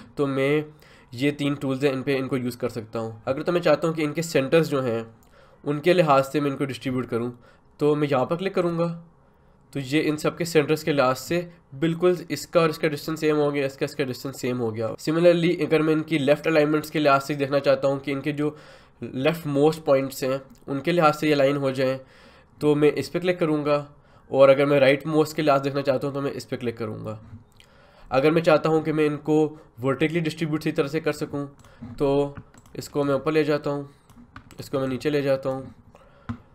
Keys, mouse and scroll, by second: 8.6 click, 14.8 click, 31.6-36.5 drag.